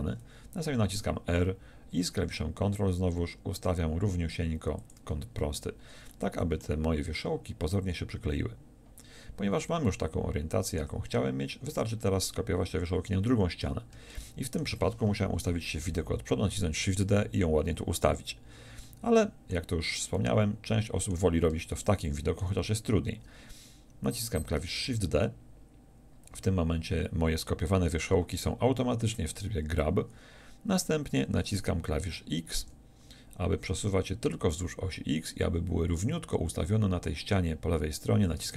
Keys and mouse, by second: 1.0 r, 5.0-6.6 drag, 15.4 KP_1, 24.8 shift+d.